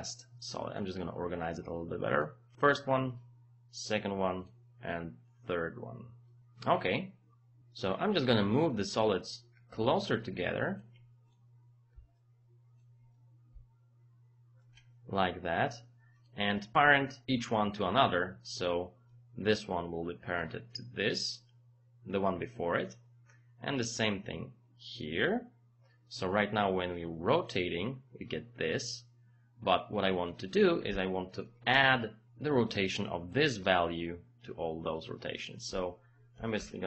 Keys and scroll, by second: 31.5 KP_0, 31.7 Return, 36.3 KP_0, 36.6 Return.